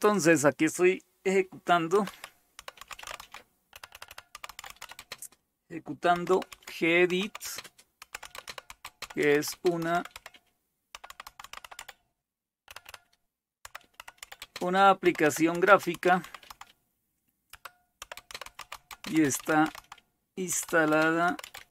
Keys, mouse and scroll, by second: 2.3-21.7 typing.